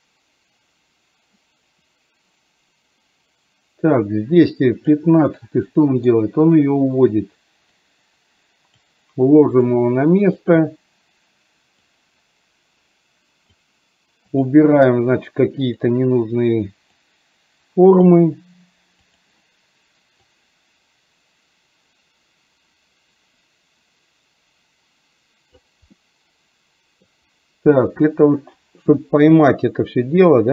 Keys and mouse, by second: 5.2 middle click, 8.0 click, 9.6 click, 12.0-13.7 drag, 14.4 click, 17.1 click, 19.1 click, 20.3-25.7 drag, 26.0-27.1 middle drag, 28.4-30.5 drag.